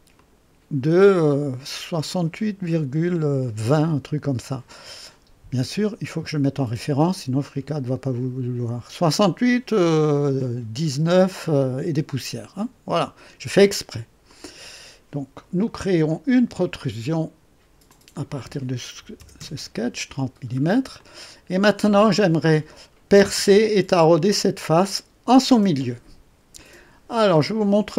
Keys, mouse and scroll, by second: 0.1 click, 6.6 click, 12.9 click, 14.2 click, 15.6-15.9 scroll down 1, 16.1 click, 17.8 click, 19.1 KP_0, 19.3 KP_Enter, 20.4 scroll down 1, 20.9-21.9 drag, 26.5-27.3 drag.